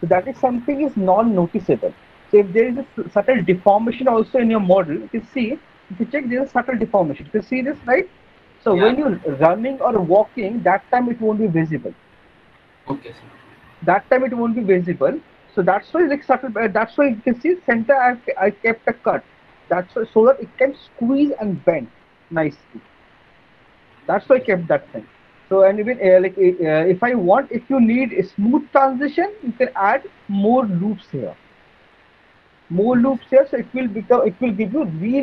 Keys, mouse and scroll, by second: 4.6 alt+middle click, 5.1 middle click, 5.4 alt+middle click, 6.3 middle click, 6.4 alt+middle click, 8.5 middle click, 8.7 alt+middle click, 9.1 middle click, 15.2 middle click, 15.4 middle click, 17.7 alt+middle click, 17.9 alt+middle click, 18.2 middle click, 19.8 middle click, 23.0 middle click, 23.9 alt+middle click, 24.3 middle click, 25.2 alt+middle click, 25.6 middle click, 25.7 middle click, 26.4 alt+middle click, 27.0 middle click, 27.4 middle click, 28.4 alt+middle click, 28.9 middle click, 29.0 alt+middle click, 29.6 middle click.